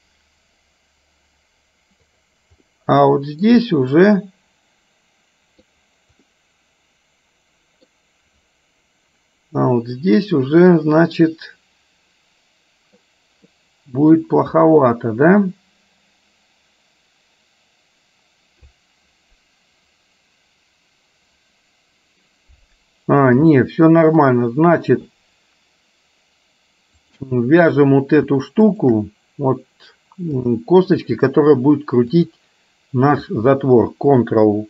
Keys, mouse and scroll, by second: 2.7 middle click, 4.1-5.7 middle drag, 6.4-8.0 middle drag, 10.1-13.2 middle drag, 23.6 shift+middle click, 27.1 click, 28.7 shift+click, 30.6-31.6 drag, 32.2 click.